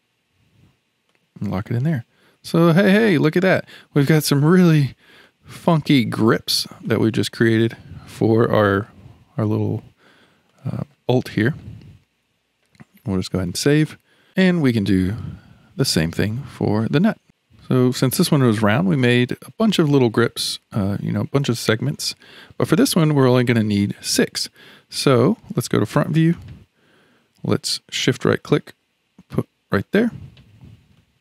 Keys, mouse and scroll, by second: 1.9-2.7 middle drag, 2.7 scroll down 4, 3.4-4.4 middle drag, 4.4 click, 5.2-6.4 middle drag, 6.4-6.8 scroll up 2, 6.8-13.2 shift+middle drag, 13.2 ctrl+s, 14.3-16.7 shift+middle drag, 16.7 click, 17.2-19.5 shift+middle drag, 22.0-23.0 shift+middle drag, 23.0 click, 23.5 click, 25.8 KP_1, 28.5 shift+right click, 31.0-31.2 shift+middle drag.